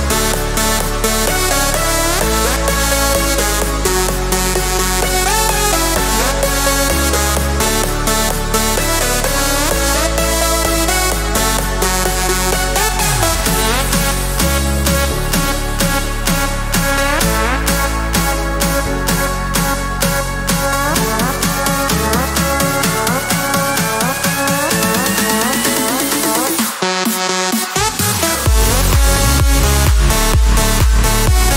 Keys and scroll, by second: 1.9 Escape, 5.6 Escape, 8.1 Escape, 30.6 t.